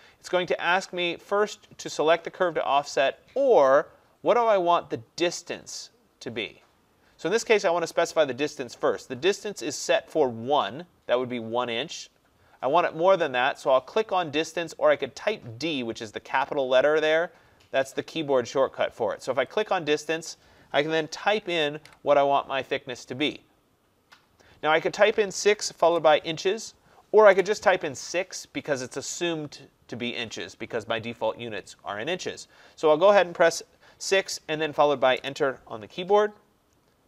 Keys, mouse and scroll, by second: 19.7-24.8 drag, 21.9 6, 25.9 shift+', 27.4 BackSpace, 35.2 Return.